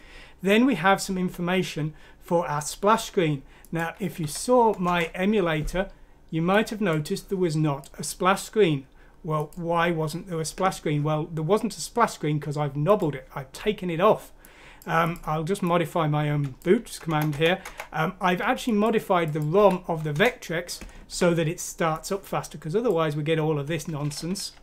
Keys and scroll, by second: 4.2 F6, 4.9 Return, 17.1 BackSpace, 17.3 BackSpace, 17.6 BackSpace, 19.6 F6, 20.1 Return.